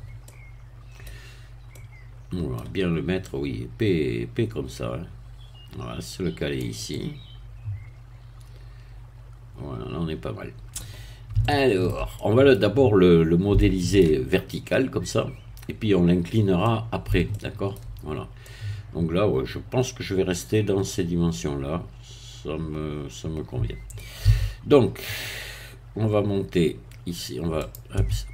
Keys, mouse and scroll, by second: 0.2-1.2 middle drag, 1.3-1.7 scroll up 2, 1.7-2.7 middle drag, 3.3-6.7 drag, 6.9-11.2 middle drag, 11.4 shift+middle click, 12.1 shift+middle click, 12.6-13.5 scroll down 2, 13.5 shift+middle click, 16.2 scroll up 1, 16.6 middle click, 18.1 shift+scroll up 2, 18.4-24.2 middle drag, 24.2 a, 27.7 click, 27.9 Tab.